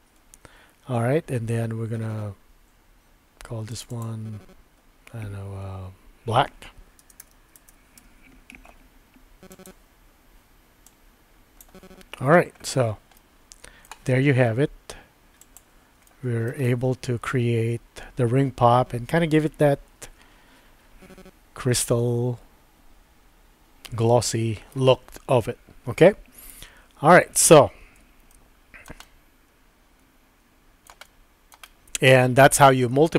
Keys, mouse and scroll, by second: 3.7 click, 3.9-8.7 drag, 9.5-9.8 drag, 13.2-13.9 middle drag, 15.4 click, 16.1-16.5 shift+middle drag, 16.6-24.8 middle drag, 28.3-28.9 shift+middle drag, 29.1-31.6 middle drag, 31.7 middle click.